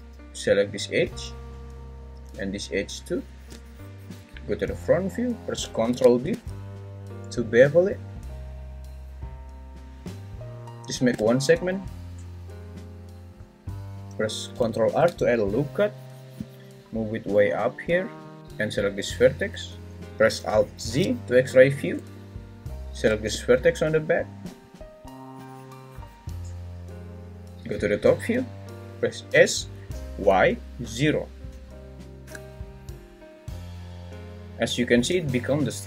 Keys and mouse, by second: 5.8 ctrl+b, 14.9 ctrl+r, 20.9 alt+z, 22.0 `, 27.5 Escape, 27.5 s, 27.7 `, 29.3 s, 30.2 y, 30.8 0, 32.2 Return, 35.1 `.